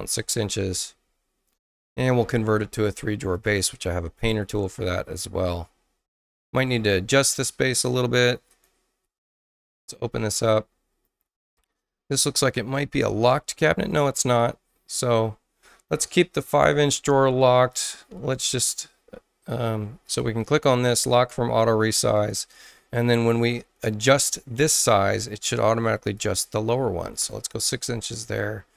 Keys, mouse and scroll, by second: 0.5 6, 0.5 Return, 3.3 click, 4.2 click, 7.3 space, 8.4 click, 11.7 click, 13.9 click, 17.5 click, 20.0 click, 21.0 click, 22.1 click, 25.9 click, 26.7 6, 27.2 Tab.